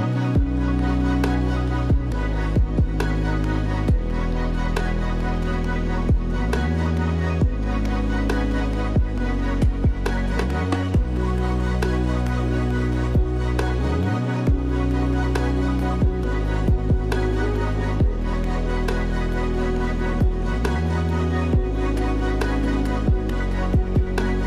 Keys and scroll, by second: 1.8 space, 3.9 space, 6.7 space, 8.2 space, 12.9 ctrl+d, 19.1 space, 20.4 space, 20.6 ctrl+z, 21.9 ctrl+z.